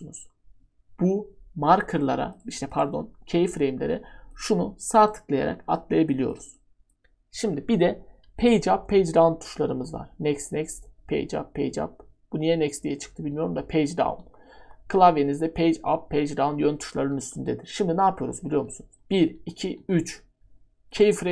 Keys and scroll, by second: 8.2 Page_Down, 8.8 Page_Down, 9.7 Page_Down, 10.3 Page_Up, 10.9 Page_Up, 11.6 Page_Down, 13.4 Page_Down, 14.0 typing, 14.2 Page_Up, 18.5-19.8 typing, 19.0 Page_Down.